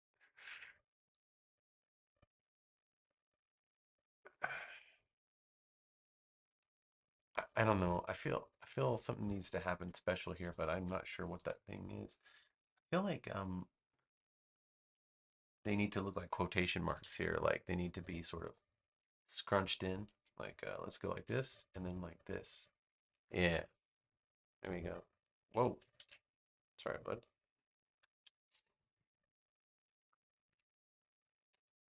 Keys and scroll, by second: 10.9 BackSpace, 16.8 super+=, 25.9 super+z, 28.1 BackSpace.